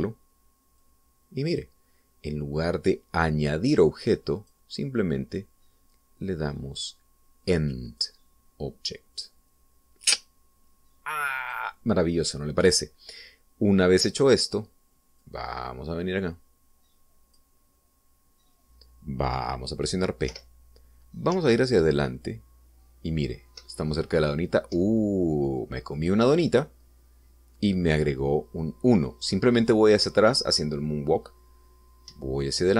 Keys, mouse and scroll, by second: 1.7 click, 5.3 click, 12.3 click, 16.1-18.4 drag, 21.2 p, 22.2 Up, 25.6 Down.